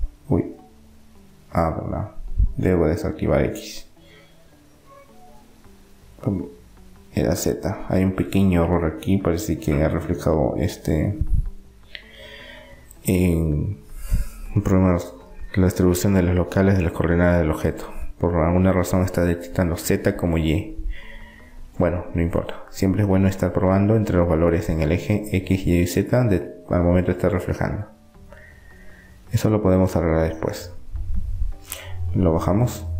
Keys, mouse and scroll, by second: 3.4-6.3 drag, 6.9-13.1 drag, 15.1-16.4 middle drag, 16.6 middle click, 17.4 Tab, 18.7-20.4 drag, 19.9 KP_7, 21.7-23.1 drag, 26.0-28.7 drag, 28.7-30.7 middle drag, 30.7-32.4 drag.